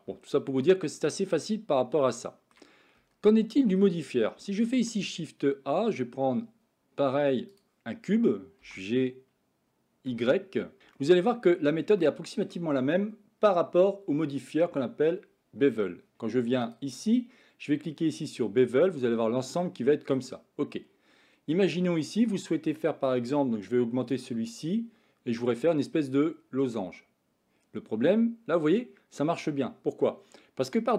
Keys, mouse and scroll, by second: 0.0-1.4 middle drag, 2.1 shift+middle click, 3.0 Tab, 3.2 middle click, 4.8 shift+a, 8.5 g, 11.0 shift+middle drag, 12.0-12.5 shift+middle drag, 16.8-18.3 drag, 18.7-20.0 middle drag, 24.2-30.9 drag.